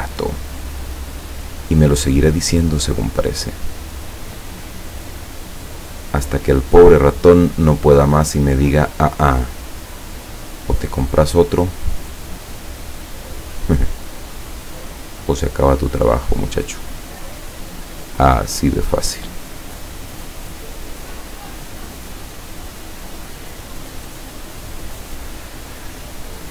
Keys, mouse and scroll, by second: 3.0 click, 6.4 click, 8.7-9.9 drag, 12.9 click, 14.8 click, 15.3 click, 19.5 click, 21.8 click, 22.5 click, 24.1 click.